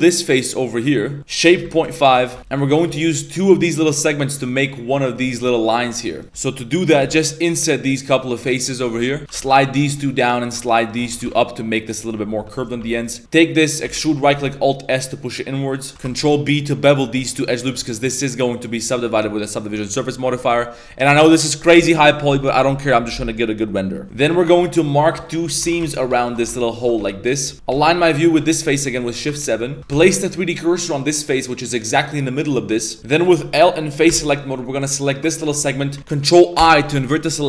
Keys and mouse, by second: 1.2 click, 2.3 Tab, 2.5 ctrl+r, 2.5 right click, 2.5 3, 7.0 i, 9.2 ctrl+z, 9.2 g, 10.3 right click, 10.8 shift+right click, 12.8 3, 12.9 right click, 13.2 middle click, 13.8 e, 14.3 alt+s, 15.9 ctrl+b, 19.7 click, 20.1 middle click, 20.4 Tab, 20.6 middle click, 24.0 3, 24.0 2, 24.3 alt+shift+right click, 24.8 alt+shift+right click, 25.2 alt+shift+right click, 25.7 ctrl+z, 25.8 alt+shift+right drag, 26.2 alt+shift+right click, 27.0 z, 27.5 z, 27.5 ctrl+shift+KP_7, 27.9 ctrl+shift+KP_7, 28.7 shift+middle click, 29.4 middle click, 29.9 shift+s, 32.6 middle click, 33.0 ctrl+z, 33.0 ctrl+e, 33.0 3, 33.0 a, 34.1 l, 35.4 shift+middle drag, 36.6 ctrl+i.